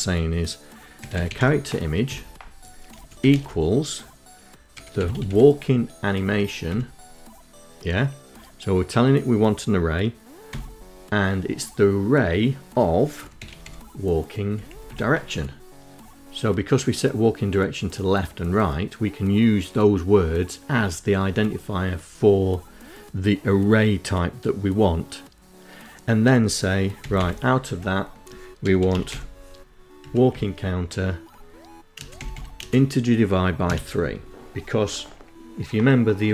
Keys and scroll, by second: 0.0-0.5 typing, 1.5 space, 1.8 =, 1.9 space, 3.1-4.3 typing, 4.7 Up, 9.1 [, 11.5-12.6 typing, 13.2 Down, 13.5 Tab, 19.9 End, 25.6 [, 25.7 ], 26.2 Left, 26.9-27.9 typing, 28.5 Up, 28.9 Tab, 30.5 space, 30.7 /.